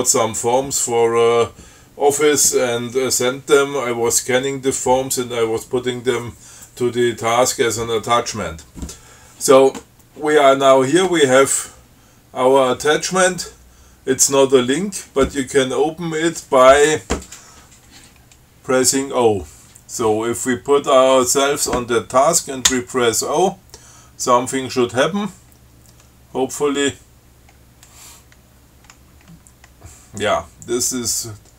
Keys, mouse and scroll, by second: 21.5 click, 22.9 o.